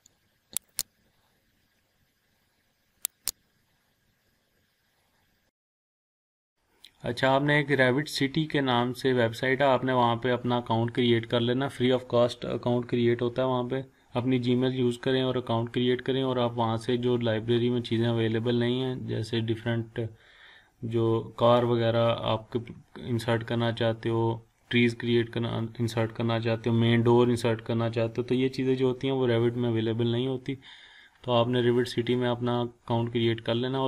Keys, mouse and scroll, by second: 0.8 click, 0.9 scroll down 1, 1.6 scroll up 1, 3.4 click, 3.6 scroll down 1, 3.9-4.9 scroll up 1, 5.1 scroll up 1, 5.4 scroll down 1, 5.7 scroll up 1, 5.9 scroll down 1, 6.1 scroll up 1, 6.5 scroll down 1.